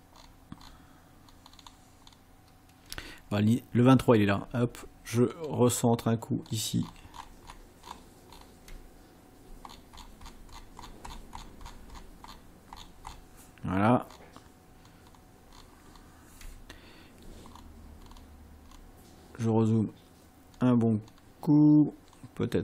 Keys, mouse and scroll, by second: 1.3-1.9 ctrl+scroll down 2, 2.0 ctrl+scroll down 2, 5.4 ctrl+scroll up 2, 6.4-7.6 ctrl+scroll up 4, 7.6-8.6 ctrl+scroll up 4, 9.7-10.2 ctrl+scroll down 2, 11.7 ctrl+scroll down 2, 12.3-13.0 ctrl+scroll down 4, 14.1-14.4 ctrl+scroll down 2, 14.9-15.3 ctrl+scroll down 2, 15.5-16.1 ctrl+scroll down 4, 17.6-18.4 ctrl+scroll up 4, 18.7 ctrl+scroll up 2, 20.6 ctrl+scroll down 2, 21.1 ctrl+scroll down 2, 22.1-22.5 ctrl+scroll down 2.